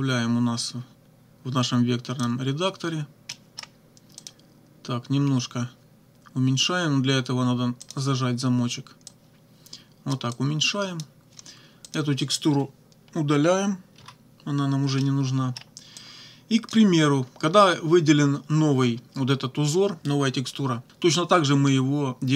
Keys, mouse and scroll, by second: 2.2 click, 3.3 middle click, 4.2 click, 7.9 click, 9.1-10.3 drag, 11.9 click, 13.9 Delete, 15.0 middle click, 16.0 click.